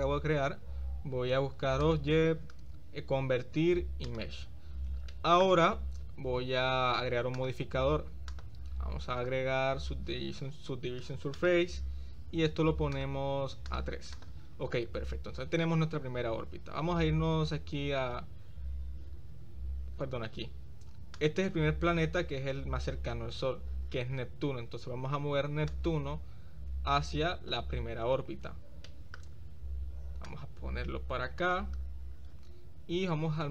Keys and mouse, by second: 2.0-4.2 drag, 4.4 middle click, 5.1-5.4 shift+middle drag, 7.4 click, 8.4-11.6 drag, 13.7 click, 21.1 click, 25.8-27.6 drag, 28.9 shift+middle drag, 30.2-31.6 drag.